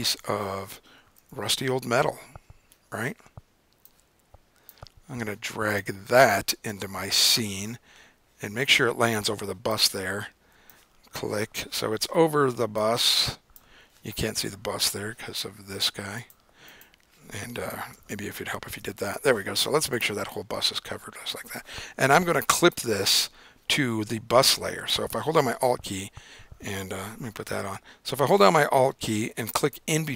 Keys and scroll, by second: 0.7 Up, 1.2 Return, 18.3 super+0.